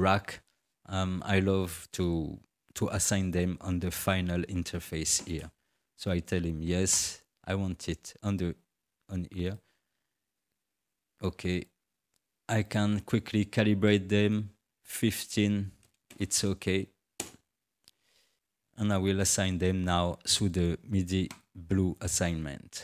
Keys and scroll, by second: 14.6 1, 14.9 5, 15.5 0, 17.2 Return.